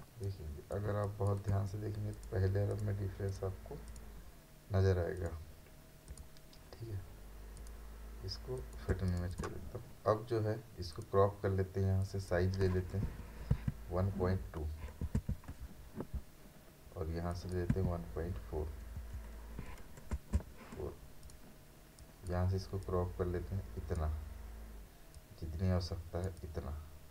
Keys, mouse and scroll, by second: 0.0 ctrl+space, 0.2 ctrl+click, 0.6 ctrl+space, 2.1 click, 8.9 space, 9.1 right click, 9.3 click, 13.5 typing, 15.5-16.4 typing, 17.3 click, 17.7 typing, 19.9-20.7 typing, 21.2-27.1 drag.